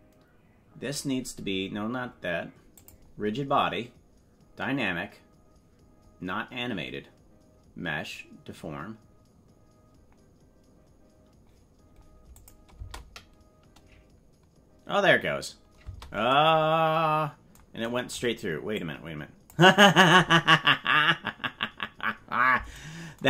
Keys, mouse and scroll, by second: 2.7 click, 12.3 click, 12.7 space, 15.8 space, 18.7 click.